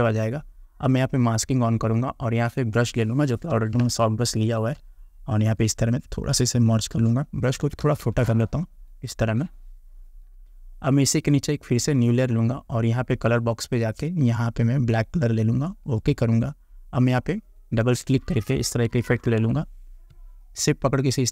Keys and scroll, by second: 3.8 space, 7.6 [, 19.0 ctrl+t.